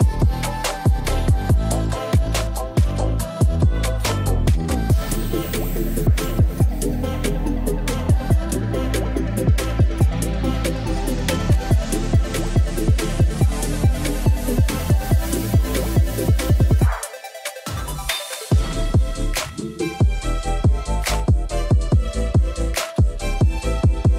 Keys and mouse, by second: 0.3 ctrl+s, 1.8 click, 2.6 space, 3.6 space, 4.4 click, 5.1 space, 7.6 space, 8.4 space, 9.5 space, 11.0 click, 15.3 click, 18.0 click, 20.9-21.8 drag.